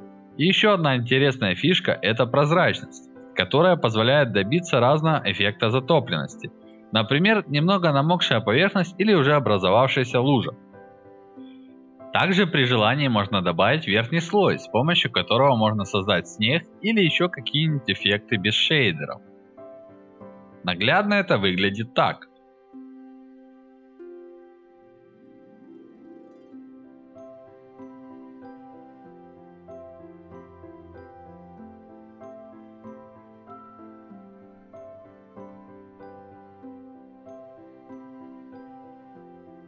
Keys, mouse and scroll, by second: 1.5-7.6 drag, 7.4 right click, 8.2 click, 10.4-14.0 alt+drag, 15.2 click, 16.5-17.6 drag, 18.3-18.9 drag, 19.2-19.6 drag, 19.9 click, 20.7 alt+right drag, 20.9 alt+click, 22.0-25.1 drag, 26.1 click, 27.5-28.4 drag, 28.6 click, 30.1-31.1 drag, 31.3 alt+drag, 32.1 click, 32.5-32.9 drag, 33.5 click, 33.7 alt+drag, 34.0 alt+right drag, 34.3 alt+click, 35.4 click, 36.2-37.6 alt+drag, 37.6 alt+right click, 37.9-38.3 alt+drag, 39.2 click.